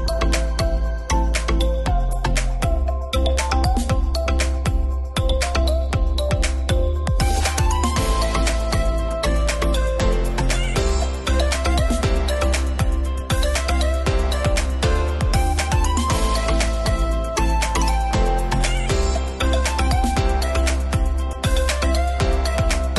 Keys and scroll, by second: 3.2 shift+d, 8.3 shift+?, 13.6-14.5 typing, 16.1 alt+{, 17.1 super+z.